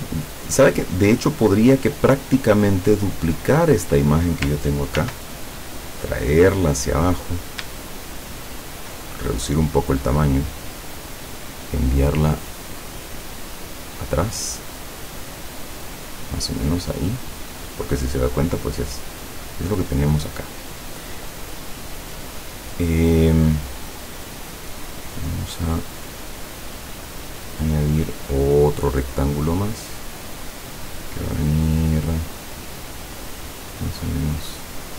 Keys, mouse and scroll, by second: 2.5 click, 2.8-3.5 scroll down 2, 3.5 click, 3.8-4.5 scroll down 2, 5.0 ctrl+d, 5.8-7.3 ctrl+drag, 8.0 ctrl+shift+click, 13.0 click, 13.5 click, 14.8-18.0 drag, 27.7 click, 33.6-34.9 drag.